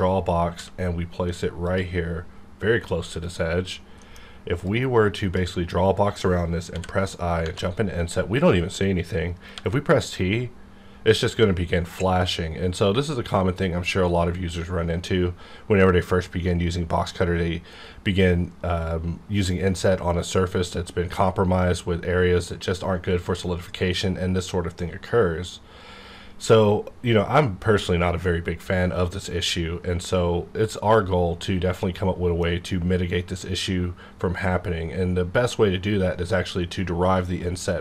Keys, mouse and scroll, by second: 0.5 g, 1.6 click, 3.7 scroll down 1, 4.0 middle click, 4.6-6.7 drag, 7.4 Tab, 9.5 t, 30.7-31.3 scroll up 1, 31.3-31.7 scroll down 1, 31.8-37.0 middle drag.